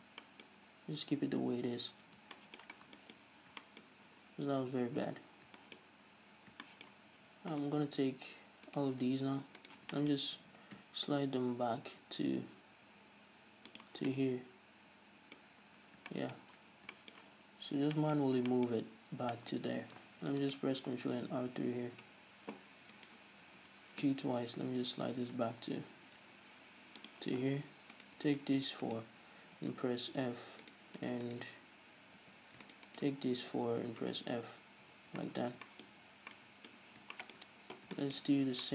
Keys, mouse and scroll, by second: 1.7 ctrl+z, 3.0 scroll down 2, 3.5-3.8 scroll up 2, 4.1-5.3 scroll up 2, 5.3-5.8 scroll down 2, 6.1-6.4 scroll up 1, 6.6 scroll down 1, 8.9 right click, 10.2-14.1 shift+middle drag, 10.6 g, 14.1 shift+click, 14.3-16.1 shift+middle drag, 16.1 scroll down 1, 19.0-19.6 scroll up 1, 19.6 shift+middle click, 19.9-20.5 scroll up 1, 20.5 ctrl+r, 22.1-23.3 middle drag, 23.3 right click, 23.7 g, 27.3 shift+click, 28.2 right click, 28.5 shift+right click, 28.8 shift+right click, 29.9 f, 30.9 right click, 32.4 f, 32.9 shift+right drag, 33.9 f, 34.1 scroll down 1, 34.7 Tab, 35.4-38.7 shift+middle drag, 38.5-38.7 scroll up 2.